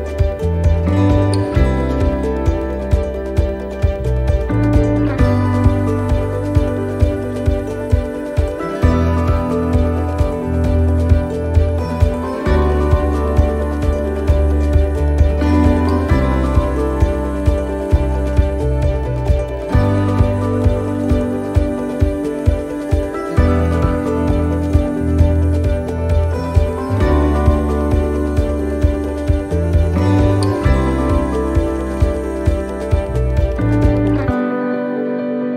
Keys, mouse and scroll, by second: 1.0 shift+d, 2.7 r, 6.5 click, 11.6 middle click, 11.9-13.0 scroll down 5, 12.6 middle click, 14.6 l, 15.0 middle click, 16.6 click, 19.3 middle click, 20.0-21.4 scroll down 3, 20.6 middle click, 23.8 click, 26.0 middle click, 29.2 scroll down 1, 29.8 middle click, 29.8-30.4 scroll down 1, 31.1 shift+d, 32.2 click, 35.0 middle click.